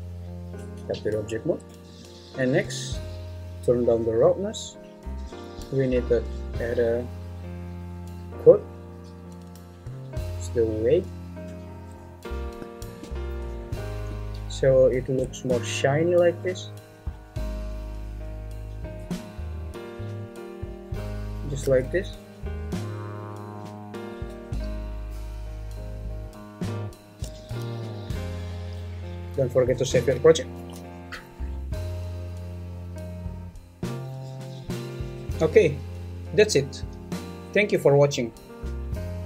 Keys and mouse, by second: 0.5 Tab, 1.7 `, 1.8 click, 3.9-5.1 drag, 6.4 click, 8.5 click, 8.9 click, 10.0-11.4 drag, 12.9 shift+middle click, 18.9-20.6 drag, 24.1 `, 30.6 ctrl+s.